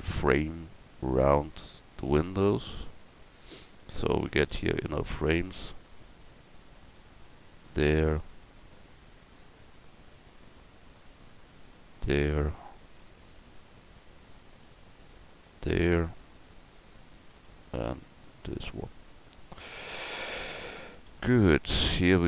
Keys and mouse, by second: 3.7 ctrl+r, 8.1 ctrl+r, 13.0 ctrl+r, 16.3 ctrl+r, 20.0 Tab, 20.6 Tab, 21.1 a.